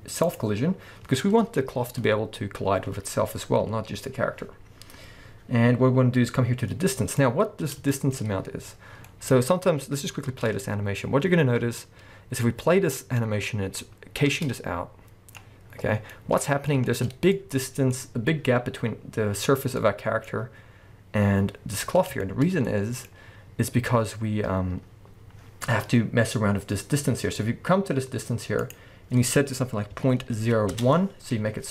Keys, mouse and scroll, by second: 0.7-3.3 scroll down 1, 5.0-7.2 scroll down 1, 7.2-28.6 middle drag, 8.2-8.6 scroll up 1, 10.3 space, 16.8-17.4 shift+scroll up 2, 20.3-21.9 scroll up 2, 21.9 scroll down 2, 28.6-31.7 drag, 30.8 Return.